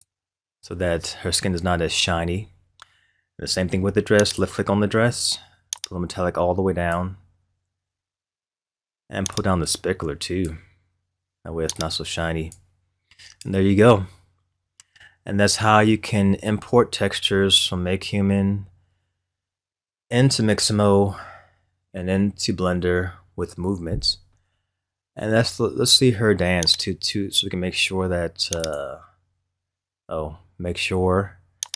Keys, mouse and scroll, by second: 1.8-3.3 scroll down 3, 4.2 click, 4.8-5.2 drag, 5.7-8.8 drag, 9.3-13.0 drag, 13.0-14.3 scroll down 1, 14.3-15.6 scroll up 3, 15.7 scroll down 1, 16.5 scroll down 1, 26.7-31.7 right drag.